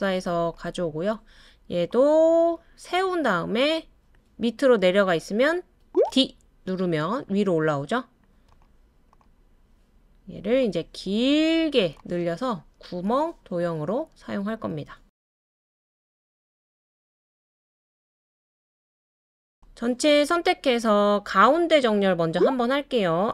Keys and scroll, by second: 6.1 d, 21.9-22.8 typing.